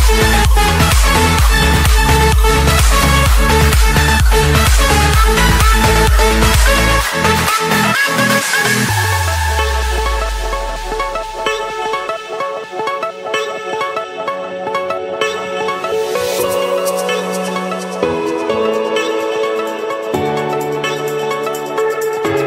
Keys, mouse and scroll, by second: 0.4 click, 2.0 click, 3.6 click, 4.9-5.6 typing, 6.5 Return, 7.5-8.6 middle drag, 9.6-10.7 drag, 11.2-11.8 typing, 12.7 Return, 13.6 Escape, 15.2-16.4 drag, 16.6-17.7 drag, 17.8-18.4 typing, 19.3 Return, 20.1 Escape, 21.8-22.4 drag.